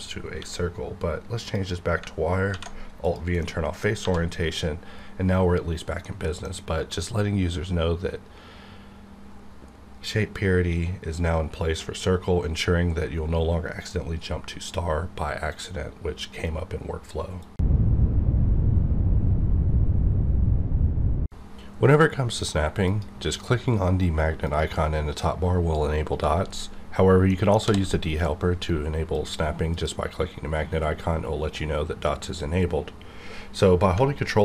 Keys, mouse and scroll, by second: 0.3 q, 1.4 click, 2.5 alt+v, 3.0 click, 3.4 middle click, 4.0 1, 6.0-17.5 middle drag, 24.4 click, 27.3 middle click, 27.6 d, 29.1 click, 29.1 click, 33.9 click.